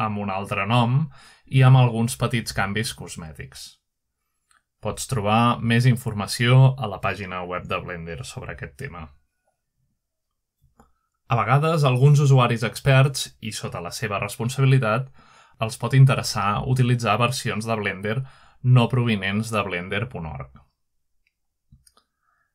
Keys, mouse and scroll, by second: 0.6 ctrl+Tab, 5.8-6.8 scroll up 3, 6.8 scroll down 2, 7.8-11.4 drag, 12.2-12.8 scroll down 1, 13.2-15.0 scroll up 3, 15.2 scroll down 2, 15.5-16.8 scroll up 2, 17.6-22.5 drag.